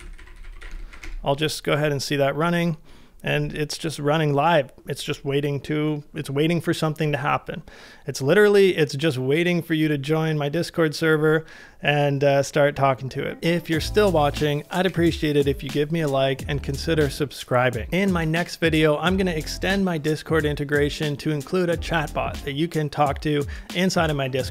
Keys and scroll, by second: 0.0-0.7 typing.